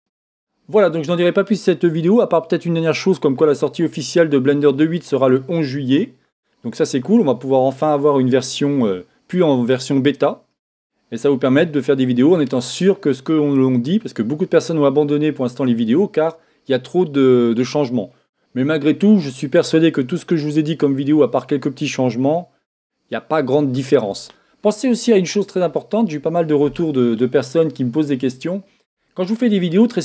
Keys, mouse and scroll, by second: 0.0-29.5 drag, 29.5-30.0 middle drag.